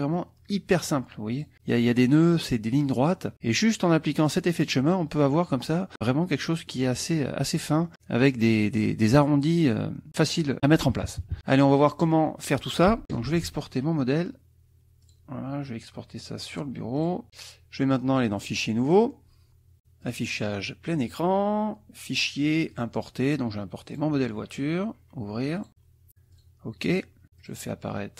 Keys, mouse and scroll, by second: 0.2 click, 1.3 click, 4.2 click, 4.7 click, 6.7 middle click, 7.9 click, 10.6 KP_Subtract, 11.6 click, 13.2 ctrl+shift+e, 14.8 click, 15.9 click, 16.8-18.1 typing, 18.4 click, 18.9 click, 20.0 click, 21.1 click, 22.1 click, 22.7 click, 23.9 click, 25.6 click, 26.3 click, 27.4 click.